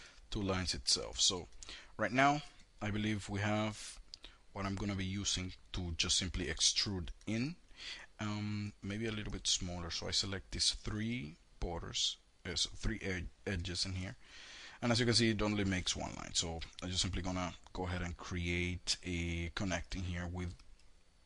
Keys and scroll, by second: 12.7 ctrl+shift+e, 14.6 ctrl+z.